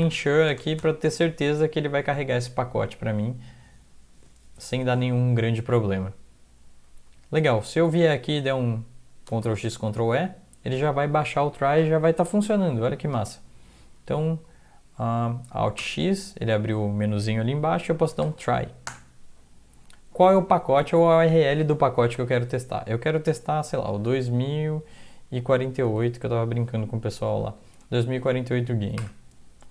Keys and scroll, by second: 0.0-0.8 typing, 1.9 Down, 6.9 Up, 7.1 Up, 7.5 Down, 7.9 Right, 9.4 ctrl+x, 9.7 ctrl+e, 15.8 alt+x, 17.8-18.7 typing, 18.9 Return, 23.7-26.3 typing, 29.0 Return.